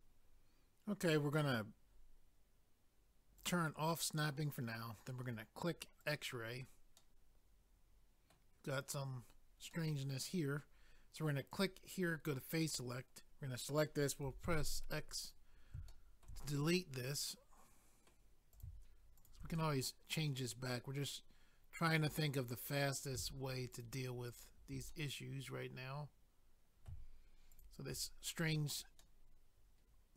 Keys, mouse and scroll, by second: 3.4 click, 3.4 click, 6.0 click, 6.1 click, 7.0 middle click, 9.7 middle click, 11.5 click, 11.6 click, 12.6 click, 12.7 click, 15.3 click, 15.3 click, 15.9 shift+middle click, 16.5 middle click, 17.6 middle click, 18.5 click, 18.7 click, 19.2 shift+click, 19.3 shift+click, 19.6 middle click, 23.7 shift+click, 24.3 shift+click, 24.9 middle click, 27.5 shift+click, 29.0 middle click.